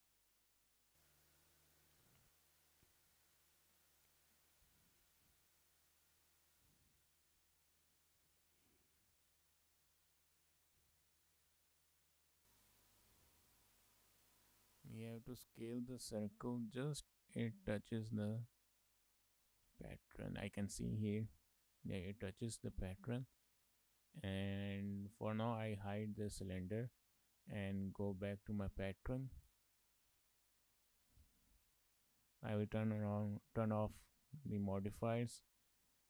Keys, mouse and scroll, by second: 0.8 middle click, 3.1 click, 3.7 shift+middle click, 3.9 middle click, 4.7 shift+middle click, 5.0 Tab, 5.5 shift+middle click, 5.6 middle click, 7.3 Tab, 7.8 click, 8.2 shift+middle click, 8.4 middle click, 9.9 s, 22.1 shift+middle click, 22.4 middle click, 23.2 shift+middle click, 23.5 middle click, 26.3 click, 26.8 shift+middle click, 27.0 middle click, 28.3 click, 28.7 shift+middle click, 29.5 Tab, 30.2 Tab, 30.9 shift+middle click, 31.0 middle click, 31.9 shift+middle click, 33.1 click, 33.5 click, 35.2 shift+middle click, 35.4 middle click, 35.8-36.0 scroll up 5.